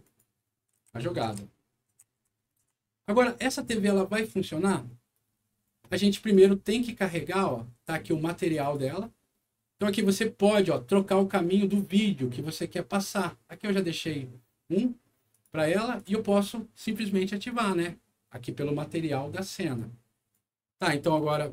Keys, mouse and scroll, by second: 0.0 click, 0.7-3.1 right drag, 0.8-3.1 typing, 6.3 click, 8.3 click, 8.5 click, 13.4 click, 15.3 click, 15.9 click, 16.8 right click, 19.7 right click, 21.1 click.